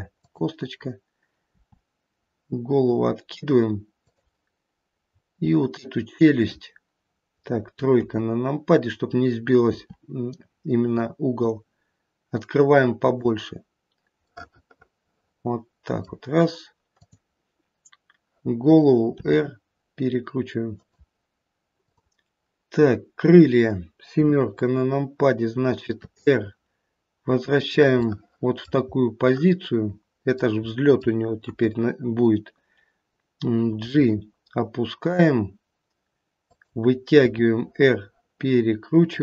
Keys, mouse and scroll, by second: 0.1 click, 1.5 r, 5.0-6.2 scroll up 2, 6.2 click, 7.9 KP_3, 9.6 r, 14.3 middle click, 15.9 middle click, 16.9 click, 19.2 r, 21.2 middle click, 21.6 click, 24.1 KP_7, 26.1 r, 28.9-29.3 scroll down 1, 29.3 middle click, 30.7 middle click, 31.5 KP_1, 33.8 g, 37.2 r.